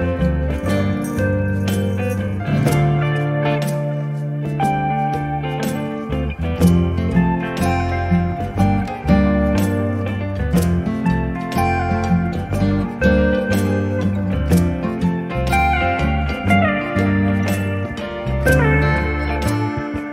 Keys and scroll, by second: 0.3 q, 1.3 space, 5.8 m, 13.2 Up, 18.4 space.